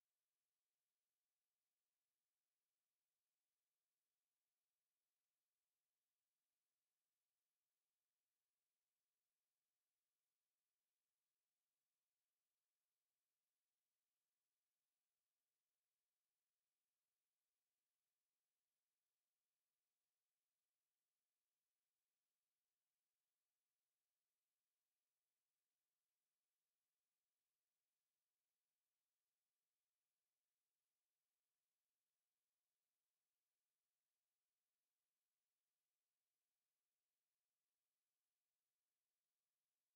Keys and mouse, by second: 0.9 alt+click, 32.0 alt+click, 32.9 alt+right click, 33.3 alt+click, 34.0 alt+right click, 34.4 alt+click, 35.2 alt+right click, 35.7 alt+click, 36.2 alt+right click, 36.6 alt+click, 37.4 alt+click, 38.6 alt+click, 39.4 alt+click.